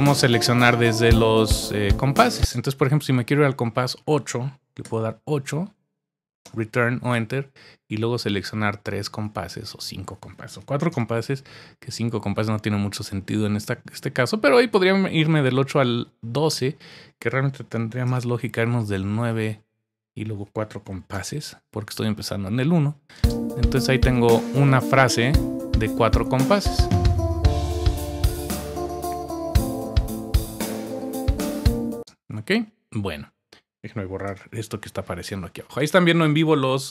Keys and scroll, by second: 2.4 space, 4.8 8, 6.4 space, 6.4 Return, 10.6 4, 10.9 Return, 17.7 9, 18.9 Return, 20.8 4, 23.1 space, 31.9 space, 33.5 space.